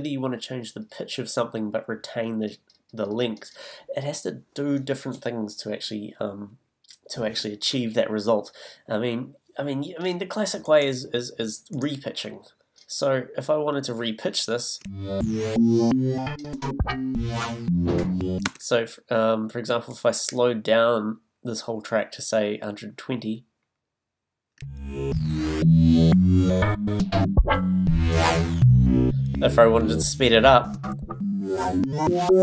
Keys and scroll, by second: 14.8 space, 18.4 space, 24.6 space.